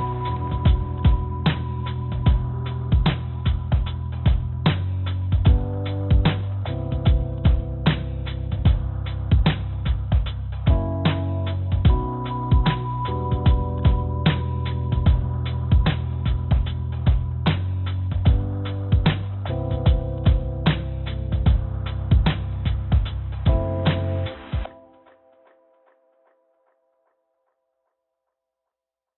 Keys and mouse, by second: 0.4 click, 2.3 click, 3.1-4.2 drag, 4.7 s, 7.0 click, 7.3 click, 7.6 click, 7.8 click, 8.9 t, 8.9 g, 13.3 click, 15.0 e, 15.9-16.4 drag, 18.4 1, 19.0 e, 20.3-21.7 drag, 21.8 ctrl+z, 22.4 1, 24.1 click, 25.5 e.